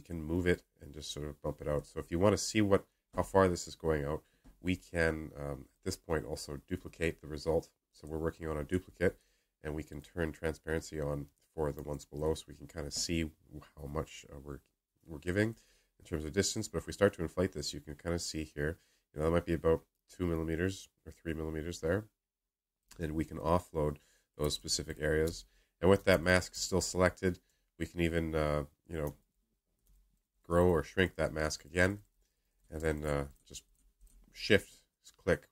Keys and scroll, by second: 25.2-25.9 space.